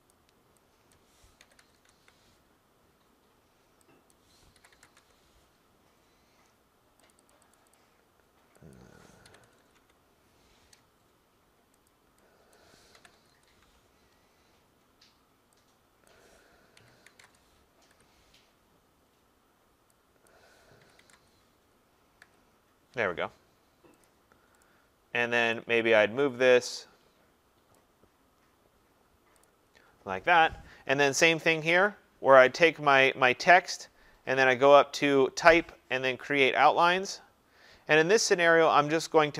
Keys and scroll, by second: 1.8 Tab, 9.9 Tab, 17.8 Return.